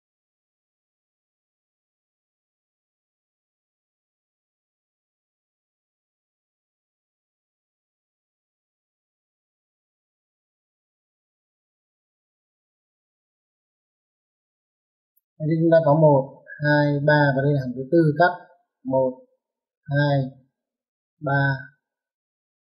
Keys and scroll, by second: 4.2 space.